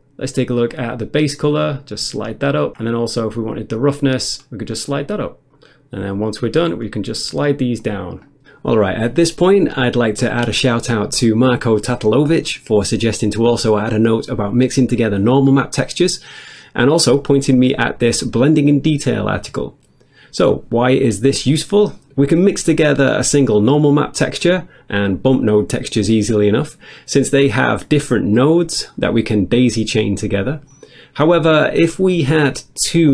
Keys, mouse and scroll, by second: 0.7 click, 1.5 click, 2.5 click, 3.9 click, 4.7 click, 5.5 click, 6.0 click, 6.6 click, 6.9 click, 7.8 click, 8.2 click, 8.5 click, 8.8 click, 9.3 click, 13.4 click, 16.8 click, 20.2 click.